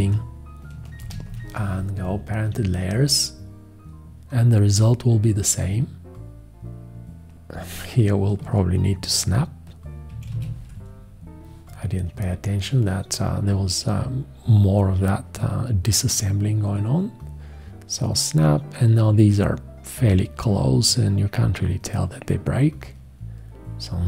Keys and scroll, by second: 1.0 alt+;, 9.9-10.8 typing.